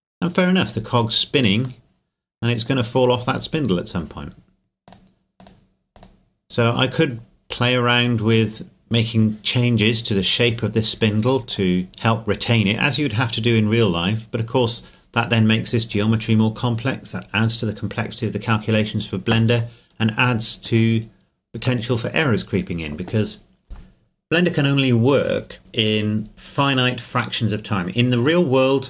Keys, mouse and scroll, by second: 1.8 middle click, 3.6 scroll up 1, 4.9 click, 11.5 click, 13.9 click, 15.9 right click, 19.7 right click, 19.9 middle click, 21.7-23.6 scroll up 1, 23.6 scroll down 1.